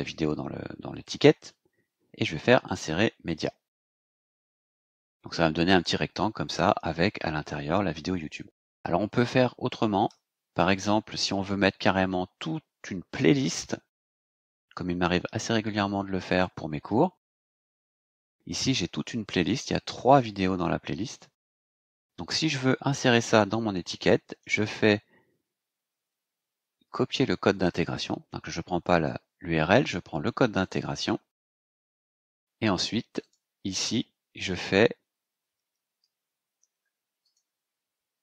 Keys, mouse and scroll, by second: 2.6 click, 4.3 click, 5.7-6.0 scroll down 2, 10.0 Return, 16.2 click, 17.2-17.5 scroll down 2, 17.7-18.8 scroll down 6, 20.1 click, 22.2 click, 24.2 right click, 30.6 click, 33.2 click, 37.2 click.